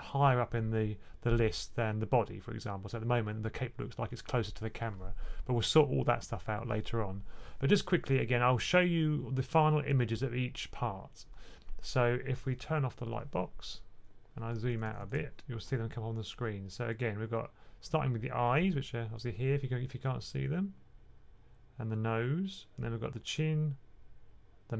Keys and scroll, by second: 14.4-14.9 typing.